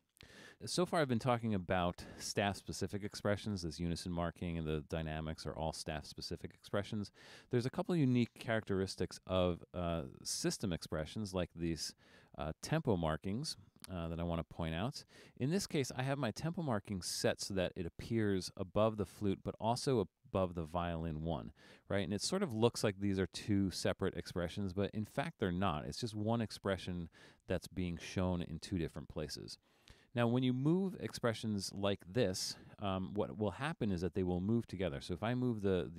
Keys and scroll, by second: 9.7 super+=, 10.2 super+-, 10.8 super+-.